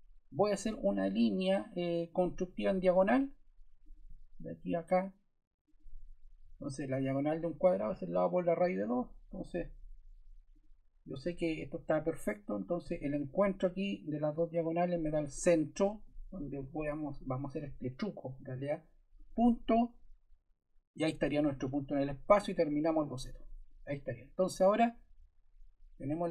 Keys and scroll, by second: 6.6 Escape, 16.6 Escape.